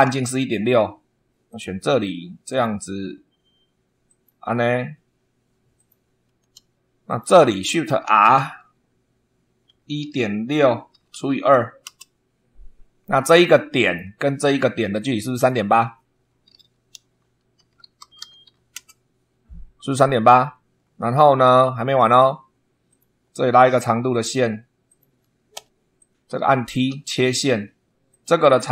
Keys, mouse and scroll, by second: 0.0 super+2, 1.4 click, 2.4 click, 4.0 click, 5.7 click, 6.3 Escape, 7.0 click, 8.0 shift+r, 9.6-11.8 typing, 13.8 click, 15.2 click, 17.3-18.9 typing, 20.7 scroll down 2, 21.2 shift+middle click, 22.8 click, 24.0 click, 24.8 click, 25.5 Escape, 25.9 click, 26.9 t, 28.0 click.